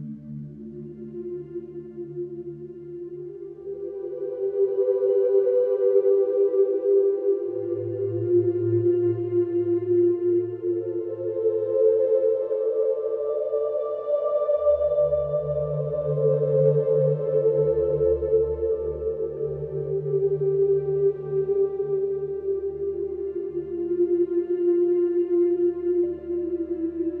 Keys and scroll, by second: 0.6 4, 2.0 3, 6.1 4, 8.2 2, 12.0 Escape, 13.5 4, 14.3 3, 15.1 F1, 18.5 Escape, 23.6 Delete.